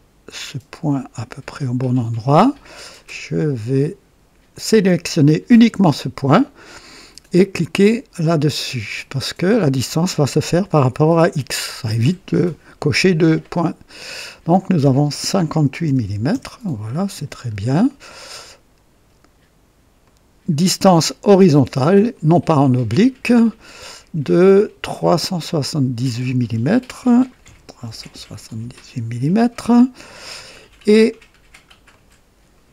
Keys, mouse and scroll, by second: 2.3 click, 4.5 click, 8.9 click, 15.8 KP_5, 15.8 KP_5, 16.0 KP_8, 16.0 KP_8, 16.3 KP_Enter, 17.4-17.7 scroll down 2, 17.9-18.6 right drag, 20.0 click, 22.1 click, 25.4 click, 27.4 KP_3, 27.8 KP_7, 27.8 KP_7, 28.1 KP_8, 28.6 KP_Enter, 31.3-31.7 scroll down 1, 31.9-32.6 right drag.